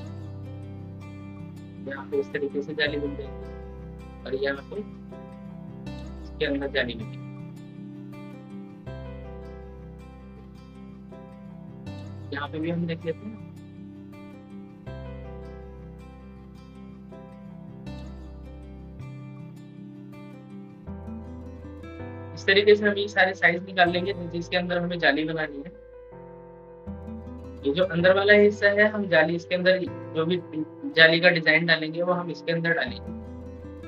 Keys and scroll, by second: 1.5 ctrl+k, 9.1 ctrl+k, 19.4 ctrl+k, 27.0 ctrl+k.